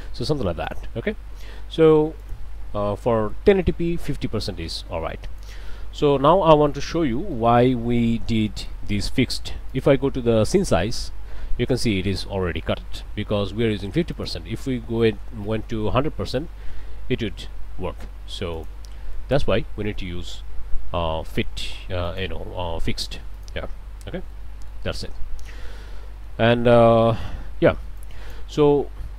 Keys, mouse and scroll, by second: 0.7 click, 2.3 click, 3.0 5, 3.1 0, 3.5 Return, 4.8 click, 6.0 middle click, 6.5 middle click, 7.4 middle click, 7.9-8.4 scroll up 1, 8.5 middle click, 9.7 click, 10.5 click, 14.2 click, 14.8 1, 15.0 0, 15.4 Return, 16.7 middle click, 17.1 middle click, 18.6 click, 19.1 5, 19.3 0, 19.4 Return, 20.4-20.8 scroll down 2, 20.8 scroll up 2, 22.1 click, 23.4 click, 24.0 scroll down 2, 24.3 middle click, 25.2-26.5 scroll down 4, 26.5-26.9 scroll up 2, 27.0 click, 28.0 click.